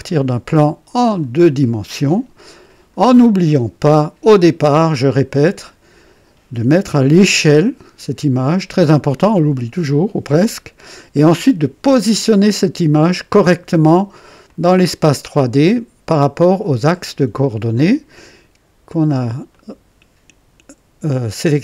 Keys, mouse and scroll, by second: 0.0-1.4 drag, 1.5-3.1 drag, 4.6 click, 14.4-15.8 drag, 16.9-18.2 drag, 19.4 click.